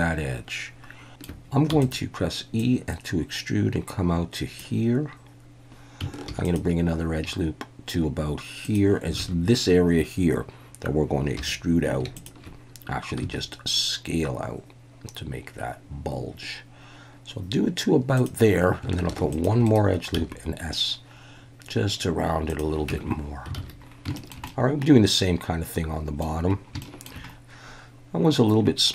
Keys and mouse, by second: 1.0 ctrl+shift+z, 1.0 shift+middle click, 1.7 e, 1.8 click, 2.6-4.6 drag, 6.3 ctrl+r, 8.6 click, 9.2 alt+a, 11.4 3, 12.2 alt+shift+click, 13.2 s, 18.1 click, 19.1 ctrl+r, 19.6 right click, 20.1 s, 22.5 click, 22.9 Tab, 23.6 alt+a, 24.2 shift+middle drag, 24.5-26.2 middle drag, 26.8 shift+drag.